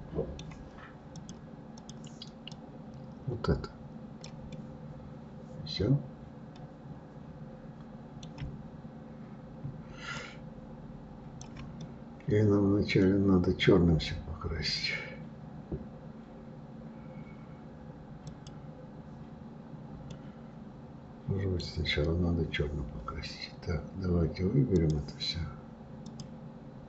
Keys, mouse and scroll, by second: 1.1-4.5 drag, 4.5-7.5 middle drag, 10.2-11.8 shift+drag, 11.8-14.8 middle drag, 18.2-20.1 drag, 20.1-23.1 middle drag, 24.7 click, 26.1-26.8 drag.